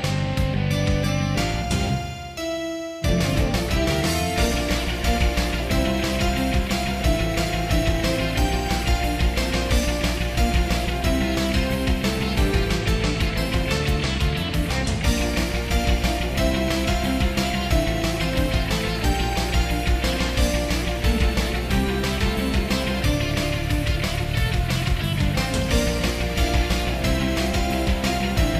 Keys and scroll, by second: 1.7 ctrl+z, 2.2 ctrl+z, 4.2 ctrl+z, 6.6 ctrl+z, 8.0 ctrl+z, 8.3 ctrl+z, 9.0 ctrl+z, 9.5 ctrl+z, 10.3 ctrl+z, 11.2 ctrl+z, 12.1 ctrl+z, 13.6 ctrl+z, 15.8 ctrl+z, 16.3 ctrl+z, 16.7 ctrl+z, 17.7 ctrl+z, 18.1 ctrl+z, 20.3 ctrl+z, 22.1 ctrl+s, 26.8 ctrl+z.